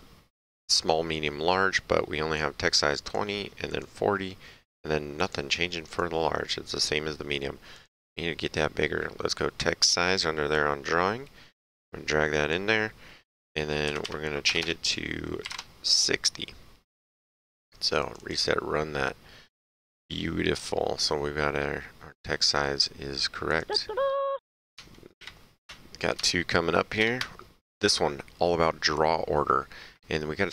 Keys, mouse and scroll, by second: 2.4 click, 3.7 click, 5.2 click, 7.8 click, 10.5 click, 13.9 Left, 14.5 BackSpace, 15.4 KP_6, 15.5 KP_0, 18.0 click, 23.5 click, 25.2 ctrl+Page_Down, 27.0 ctrl+Page_Down.